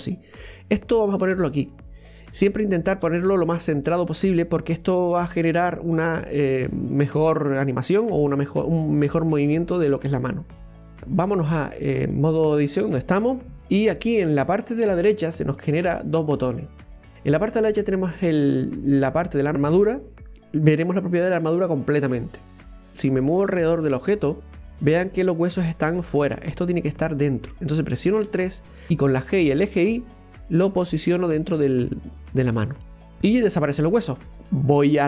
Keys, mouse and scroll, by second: 2.9 right click, 3.1 g, 4.6 right click, 4.8 g, 11.8-14.8 drag, 15.5 click, 16.9 click, 17.3 click, 26.5-27.6 middle drag, 27.6 KP_3, 33.1 KP_1.